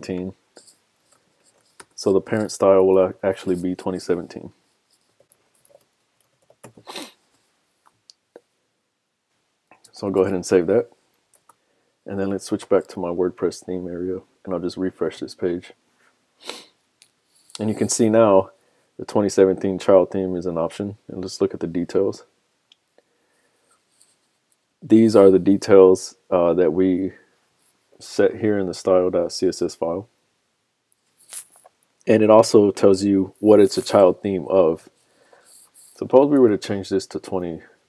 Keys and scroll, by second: 9.9 super+s, 12.1 super+Tab, 28.1 super+Tab, 31.7 super+Tab, 36.6 super+Tab.